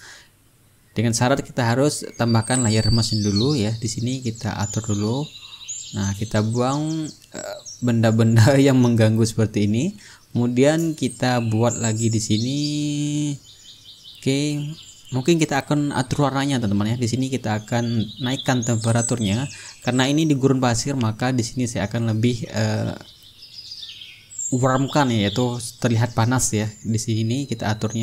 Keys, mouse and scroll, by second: 0.5-2.3 drag, 2.7-5.8 drag, 6.2-10.0 drag, 10.7 click, 14.8-17.0 ctrl+middle drag, 17.1 click, 18.4 click, 20.5-24.5 drag, 24.9 click, 26.2-28.0 drag.